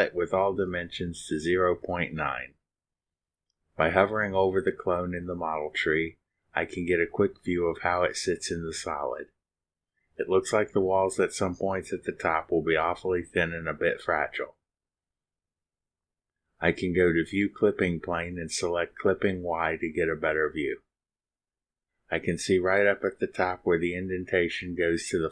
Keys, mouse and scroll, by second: 0.0-1.3 typing, 0.5 Tab, 2.9 click, 16.2 click, 21.9 click, 25.2 click.